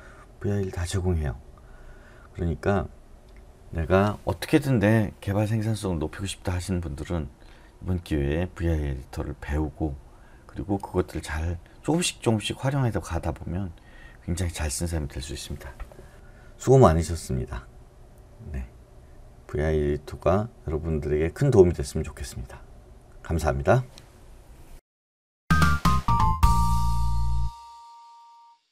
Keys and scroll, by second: 24.7 space.